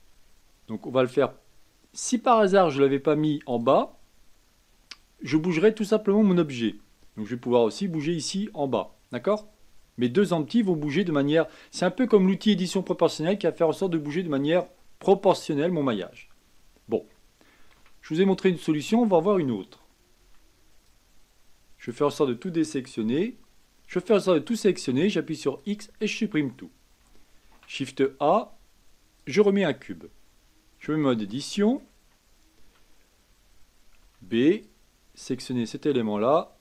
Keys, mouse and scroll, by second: 3.5 click, 7.3 g, 17.7 KP_1, 20.2 b, 24.9 x, 27.4 shift+a, 30.9 Tab, 31.3-32.6 middle drag, 32.6 a, 34.0 b, 35.8-36.6 middle drag.